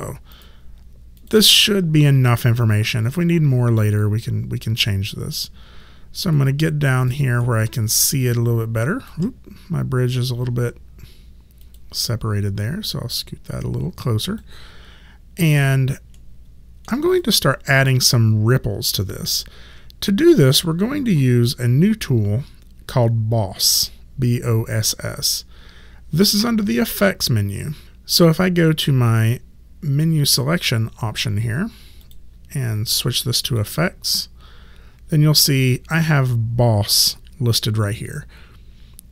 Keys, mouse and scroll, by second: 0.3 click, 6.3 alt+click, 7.4 alt+middle click, 8.3 alt+right click, 11.7 click, 15.5 click, 16.2 alt+middle click, 17.1 click, 32.0 click.